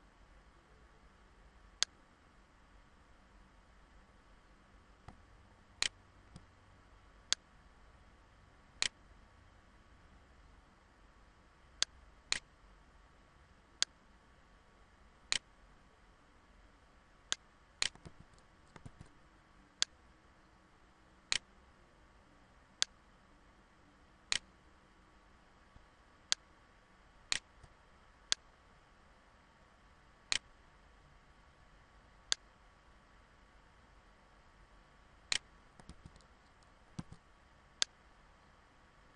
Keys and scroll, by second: 17.6 ctrl+z, 20.4 ctrl+z, 35.4 ctrl+z.